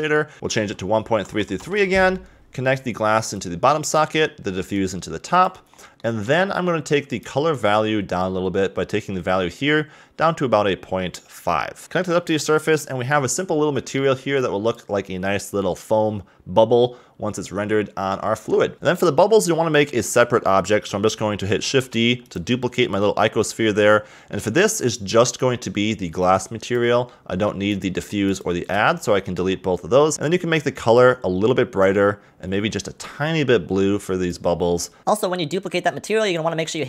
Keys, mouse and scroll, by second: 0.3 click, 1.3 3, 1.4 3, 3.3 click, 4.7 click, 5.7 scroll up 2, 5.9-6.5 middle drag, 6.5 scroll up 2, 7.1 click, 11.8-13.0 middle drag, 13.3 scroll up 2, 13.7 middle click, 14.4 click, 15.6-17.1 scroll up 1, 17.4-18.7 scroll down 7, 18.7 scroll up 4, 20.1 click, 21.7 shift+d, 24.1 scroll down 2, 24.4-25.4 middle drag, 25.4 click, 27.1 middle click, 27.7 click, 28.0 x, 28.3 click, 28.8 x, 29.1 middle click, 29.5-30.1 scroll up 1, 30.1 click.